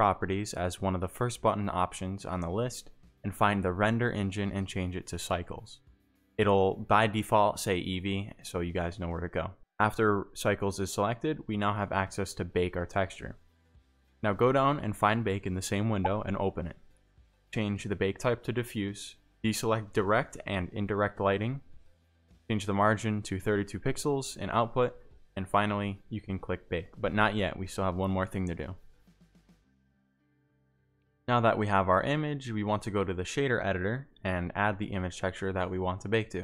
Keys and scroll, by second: 0.2 a, 10.1 Tab, 13.0 g, 13.2 y, 13.6 x, 14.8-18.3 typing, 19.9 z, 20.6 g, 27.6 3, 27.6 2, 27.7 Return, 32.5-33.8 typing, 33.8 Return, 35.0 Return.